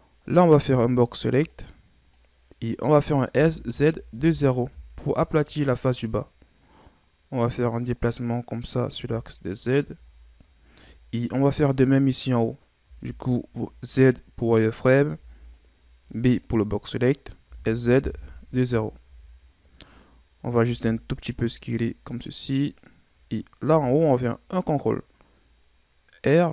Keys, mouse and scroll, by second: 0.5 b, 3.3 s, 6.7-8.9 drag, 8.9 z, 9.6-10.0 scroll down 3, 10.0-10.9 scroll up 7, 10.9-11.8 scroll up 11, 12.8 z, 14.7 right click, 15.1 b, 17.4 s, 19.0 z, 20.6 s, 23.6 ctrl+r.